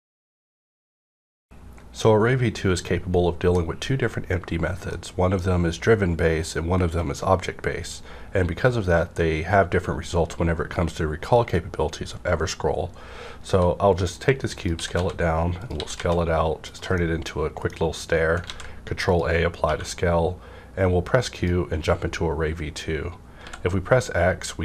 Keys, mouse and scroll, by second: 13.5-14.6 middle drag, 13.5 s, 14.5 click, 14.6 click, 14.7-16.0 typing, 15.6 click, 16.6 click, 16.9-18.4 middle drag, 17.7 scroll down 1, 18.4 ctrl+a, 19.0 click, 19.6 q, 21.5 click, 21.5 q, 23.4 x.